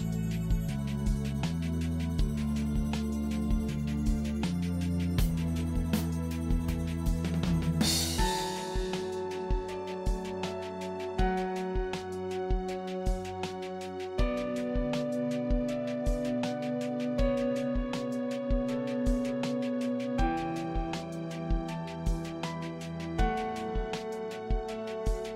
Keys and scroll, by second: 12.5 shift+h, 12.6 shift+8, 12.9 s, 13.1 g, 13.3 Return, 16.2 shift+8, 16.3 h, 16.6 g, 16.8 Return, 19.4 i, 19.5 r, 19.7 g, 19.7 Return, 22.9 ctrl+n, 23.7 6, 23.8 0.